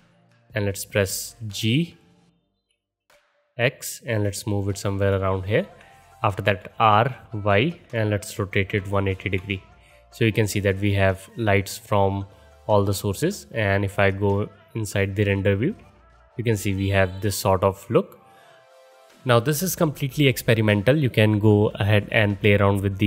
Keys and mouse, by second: 2.5 g, 6.6 r, 10.9-14.2 alt+middle drag, 14.2 click, 14.3-23.0 middle drag, 15.8 KP_0.